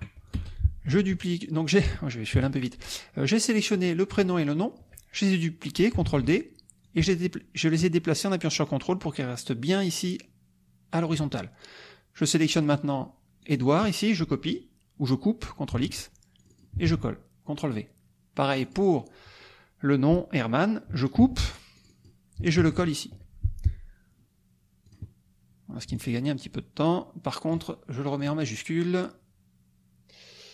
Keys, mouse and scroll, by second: 0.3-2.0 shift+drag, 0.3 shift+space, 2.3 ctrl+shift+Delete, 3.7 click, 4.3 shift+click, 6.0 ctrl+d, 6.8-11.2 ctrl+drag, 12.5 click, 13.5 click, 15.7 ctrl+x, 16.4 ctrl+click, 16.9 ctrl+v, 18.6 click, 21.2 ctrl+x, 21.7 ctrl+click, 22.6 ctrl+v, 24.8 click, 25.9-27.7 ctrl+drag, 28.2 click.